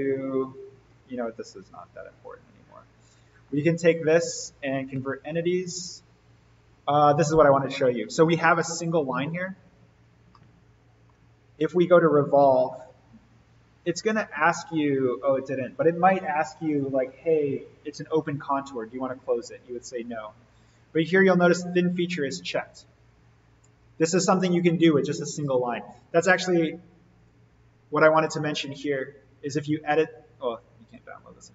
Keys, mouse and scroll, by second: 3.2 click, 4.0 ctrl+click, 4.8 c, 6.4 click, 9.6 alt+v, 10.0 scroll up 1, 10.3-11.2 middle click, 12.2 click, 27.1 click.